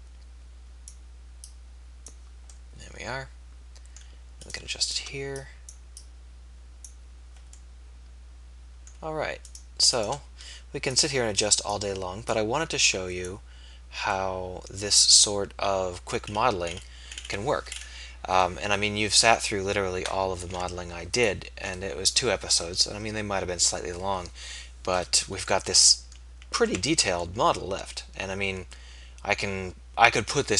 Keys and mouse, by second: 1.4 click, 2.9 middle click, 3.9 middle click, 4.5-6.9 drag, 9.6 click, 10.2 right click, 14.1-15.1 middle drag, 20.3 ctrl+s, 26.6 Tab.